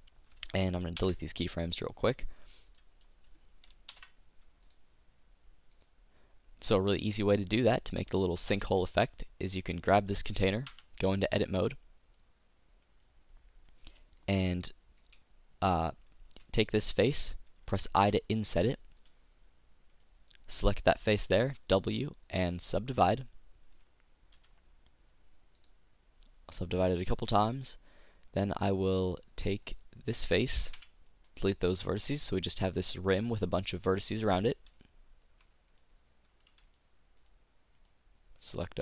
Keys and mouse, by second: 1.0 alt+i, 2.7-4.4 drag, 3.9 alt+i, 6.8-9.4 drag, 9.4 right click, 10.8 Tab, 12.9-17.6 middle drag, 18.0 i, 19.1-21.9 drag, 21.4 w, 24.3 t, 29.6-30.7 drag, 30.4 right click, 30.7 Delete, 35.8-38.8 right drag.